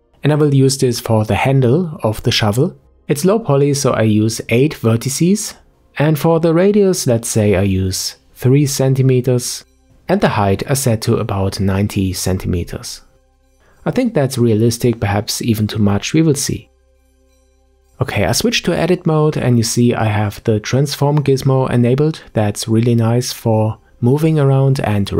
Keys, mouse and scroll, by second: 6.9-15.3 drag, 17.1-18.6 middle drag, 18.6 KP_Decimal, 19.6-20.3 scroll down 5, 20.3-22.2 middle drag, 22.2-22.6 scroll up 1, 22.6 Tab.